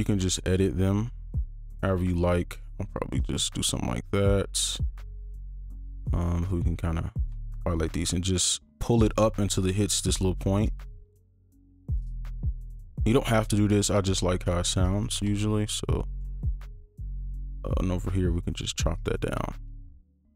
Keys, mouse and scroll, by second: 2.2 right click, 6.3 ctrl+click, 8.0 right click, 10.8 ctrl+click, 12.1 right click, 15.0 ctrl+click, 15.7 right click, 17.7 right click, 19.2 ctrl+click.